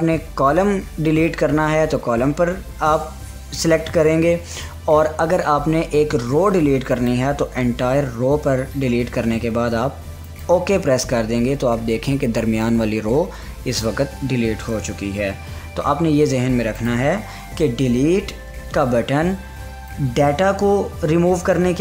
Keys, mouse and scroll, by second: 7.5 click, 10.8 click, 15.4 click, 15.7 ctrl+z, 17.3 click, 20.4 click, 20.4-21.8 drag.